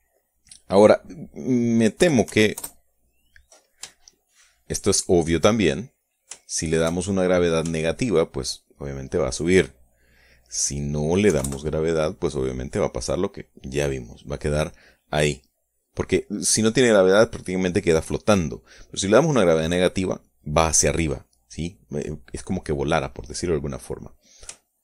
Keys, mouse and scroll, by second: 1.2 click, 2.6 KP_Subtract, 2.8 KP_1, 3.2 KP_Enter, 4.6 shift+click, 5.5 shift+click, 6.2 shift+click, 7.0-8.2 shift+drag, 8.2 shift+middle click, 8.4 shift+click, 9.2 shift+middle click, 11.0 click, 11.8 KP_0, 12.0 KP_Enter.